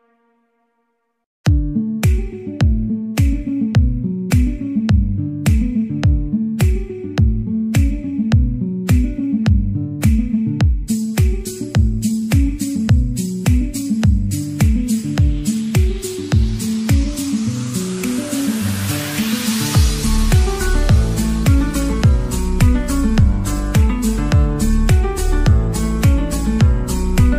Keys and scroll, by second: 25.2 b.